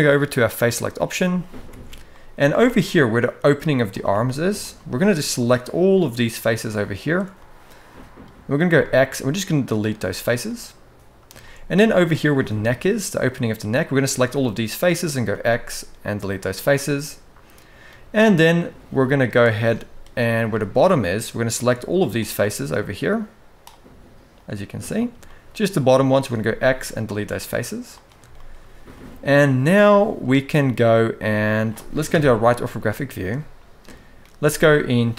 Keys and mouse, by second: 0.2 click, 0.9 shift+middle click, 1.4 alt+a, 1.8 middle click, 2.2 shift+middle click, 2.7 middle click, 4.7 shift+click, 5.1 shift+click, 6.7 shift+click, 7.1 middle click, 8.4 x, 10.2 middle click, 11.2 shift+middle click, 11.8 click, 13.6 shift+click, 14.0 middle click, 15.0 x, 16.5-17.6 middle drag, 18.8 middle click, 19.5 shift+middle click, 20.3 middle click, 21.8 shift+click, 22.5 shift+click, 24.1 shift+click, 25.0 middle click, 26.1 x, 27.2 middle click, 28.1 shift+middle click, 28.6 middle click, 30.1 middle click, 30.9 middle click, 31.8 KP_3, 32.5 shift+middle click, 34.1 z.